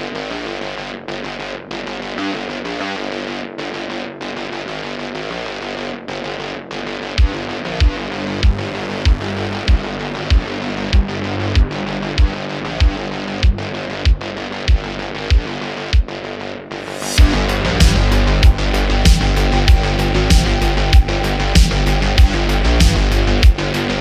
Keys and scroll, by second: 1.5 s, 1.9 y, 4.5 s, 8.8 s, 9.0 x, 9.3 y, 9.6 y, 23.8 Tab.